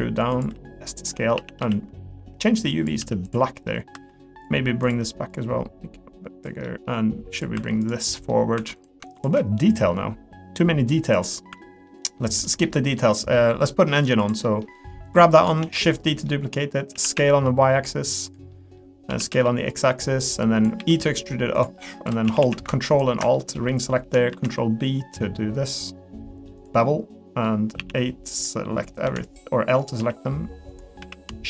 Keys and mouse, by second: 0.5 s, 1.3 a, 1.6 g, 3.5 middle click, 3.9 3, 4.4-6.4 drag, 6.6 middle click, 7.4 click, 8.1 middle click, 9.7-11.1 drag, 11.5 3, 11.6 middle click, 12.0 middle click, 12.4 middle click, 12.9 middle click, 13.6 middle click, 14.4 middle click, 15.6 shift+d, 16.1 middle click, 16.9 s, 18.5 middle click, 20.3 click, 20.8 e, 21.7 middle click, 22.0 2, 22.3 a, 22.9 ctrl+alt+click, 23.3 middle click, 24.3 ctrl+b, 26.8 middle click, 27.8 a, 28.4 click, 29.0 l, 30.0 s.